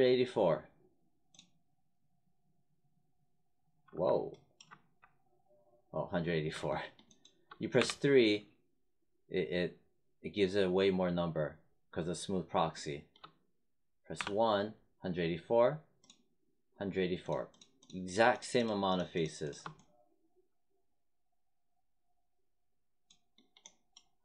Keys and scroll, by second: 4.6 1, 7.7 3, 14.2 1.